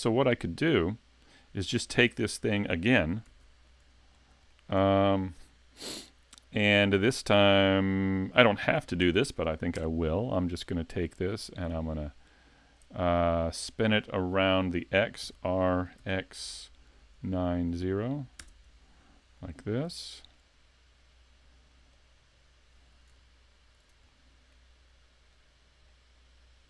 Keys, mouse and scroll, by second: 3.3 s, 4.1 scroll down 2, 4.5 shift+middle click, 6.4 shift+middle click, 9.0 shift+d, 11.3 click, 15.3 r, 19.4 middle click, 21.9 click, 23.2 alt+click, 24.1 middle click, 25.4 click.